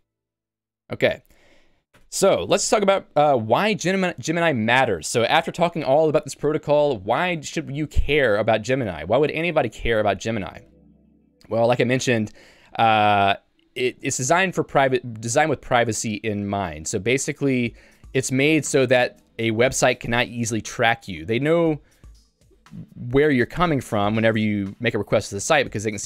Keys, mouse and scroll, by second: 2.0 Tab.